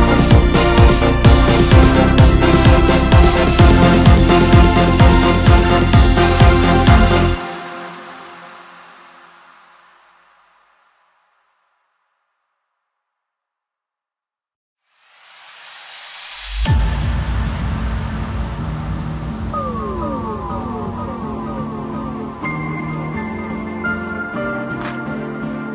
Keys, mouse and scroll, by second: 0.1 click, 1.1 Delete, 2.9-4.0 middle drag, 4.0-4.5 scroll down 4, 4.5-5.1 scroll up 1, 5.1-5.6 scroll up 1, 6.4 click, 6.8-9.8 middle drag, 12.9 KP_1, 14.6 ctrl+KP_8, 14.8 ctrl+KP_8, 15.0 ctrl+KP_8, 15.2 ctrl+KP_8, 16.8 click, 17.3 scroll up 1, 19.1-23.6 drag, 24.9 s.